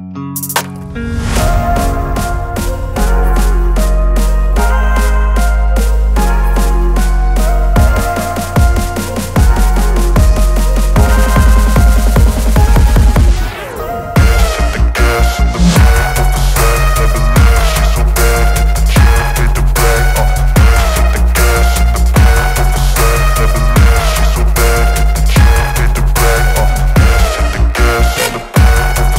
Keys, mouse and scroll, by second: 0.6-1.3 drag, 19.1-19.8 drag, 29.0-29.1 drag.